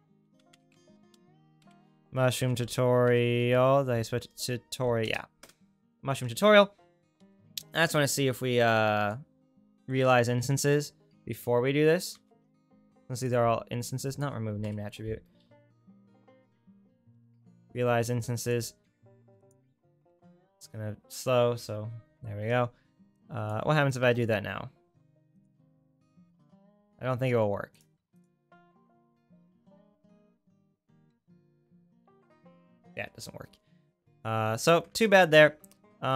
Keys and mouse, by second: 7.2 shift+a, 14.6 Delete, 15.4 shift+a, 23.2-28.2 drag, 24.0 shift+a, 28.7-36.1 drag, 35.2-36.1 ctrl+right drag.